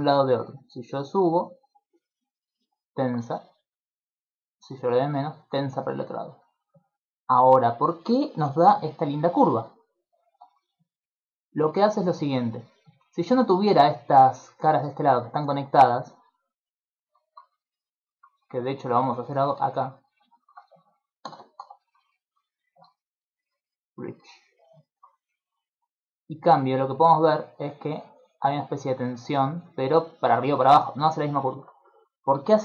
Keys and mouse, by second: 0.5 click, 2.2 middle click, 3.7 click, 8.7-17.1 typing, 9.3 click, 10.9 click, 11.9 click, 13.3 click, 13.7 click, 14.1 click, 14.4 click, 15.1 click, 15.5 click, 15.8 click, 16.1 click, 16.4 click, 16.7 click, 17.6 middle click, 19.0 alt+right click, 19.9 alt+shift+right click, 20.2 shift+middle click, 21.2 shift+d, 22.4 click, 22.4 middle click, 23.9 click, 24.6 middle click, 25.7 click, 31.5 middle click.